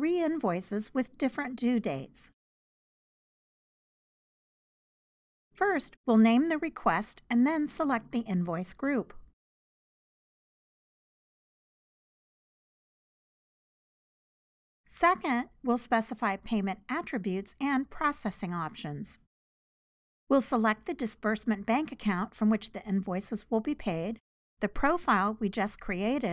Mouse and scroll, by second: 26.1-26.3 drag.